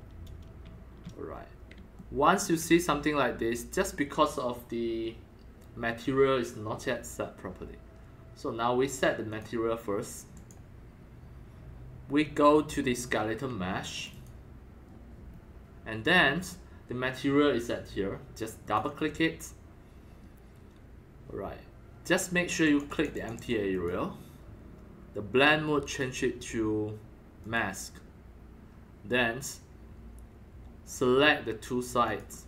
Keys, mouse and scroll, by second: 0.0 scroll down 1, 2.0 alt+middle click, 2.8-3.1 scroll up 3, 7.2 scroll, 9.3 click, 10.3 click, 13.9 click, 14.1 click, 15.2 scroll up 2, 15.6 scroll down 1, 17.7-18.8 scroll down 2, 18.6 click, 18.8 click, 22.6 click, 22.9 click, 23.1 click, 23.3 click, 23.7 click, 25.8 click, 27.4 click, 32.0 click.